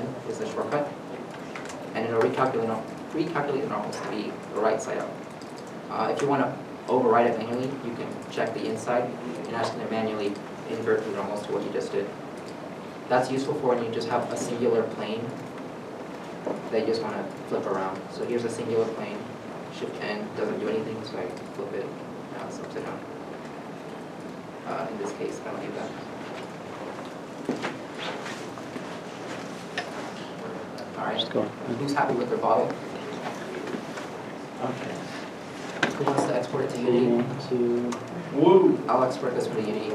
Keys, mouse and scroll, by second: 2.0 Down, 2.0 middle click, 13.2 middle click, 14.2 alt+a, 17.9 g, 20.0 shift+n, 22.1 middle click, 23.6 Tab, 24.0 Tab, 25.6 x, 27.2 middle click, 27.6 scroll down 1, 28.6 a, 29.0 Tab, 29.7 scroll, 29.7-31.7 scroll up 1, 35.3 shift+middle click.